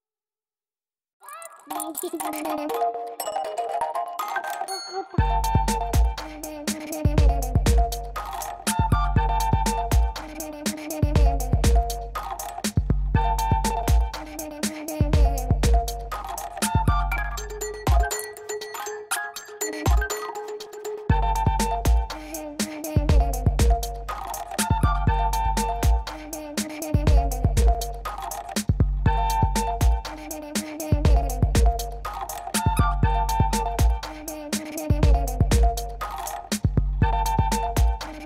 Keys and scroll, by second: 2.4 space, 4.4 [, 5.2 space, 5.4 [, 9.1 3, 12.6 space, 17.8 space, 26.6 space, 33.7 F9, 37.0 F9.